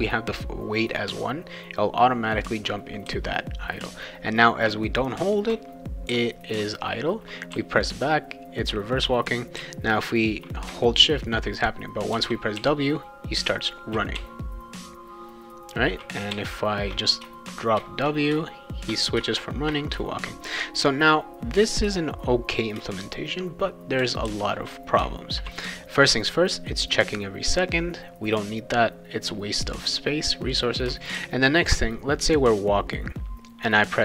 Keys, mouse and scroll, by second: 3.1 w, 6.1 w, 7.5 s, 9.6 w, 12.1 shift+w, 12.5 shift+w, 14.1 shift+w, 16.3 shift+w, 19.9 shift+w, 20.8 w, 21.8-24.3 typing, 31.2 shift+w.